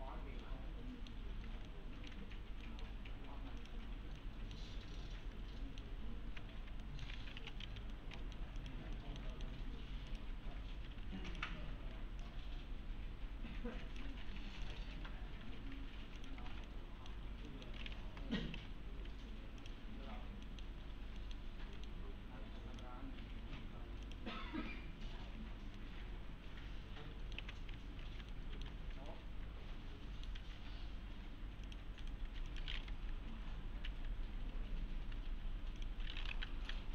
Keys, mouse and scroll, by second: 0.7-1.4 middle click, 1.7-2.3 alt+middle click, 2.3-2.6 scroll down 1, 2.6 middle click, 3.6 click, 4.0 scroll down 1, 4.2-4.8 middle click, 5.0-5.9 alt+middle click, 6.8 alt+middle click, 7.1-8.1 typing, 7.9-8.6 middle click, 8.6 click, 9.0 alt+middle click, 10.1 click, 10.5-11.5 typing, 11.3 click, 14.3 2, 14.7 click, 15.7 4, 16.2 click, 16.7 alt+middle click, 17.0-17.3 alt+middle click, 18.1 l, 18.6 v, 19.6 click, 20.2-20.5 scroll down 1, 20.5 middle click, 20.8 scroll up 1, 21.2 middle click, 22.8 click, 23.2 1, 24.1 click, 24.9 scroll up 1, 25.8-27.7 alt+middle click, 27.4 q, 28.0 alt+scroll down 2, 28.3-29.0 alt+middle click, 28.8 scroll up 1, 29.1-30.3 alt+middle click, 30.4 alt+1, 31.7 click, 32.0 right click, 32.3 4, 32.5 click, 34.5-35.8 typing, 35.8 click.